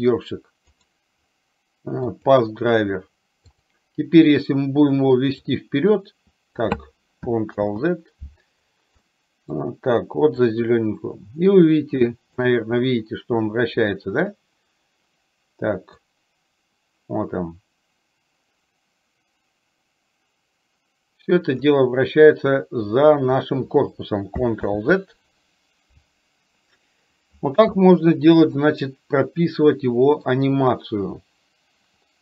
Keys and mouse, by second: 0.8-2.4 right drag, 3.7 click, 5.4-6.7 drag, 7.7 ctrl+z, 9.0-9.7 middle drag, 10.7-12.4 drag, 16.2-21.7 drag, 24.8 ctrl+z, 28.7-30.4 middle drag.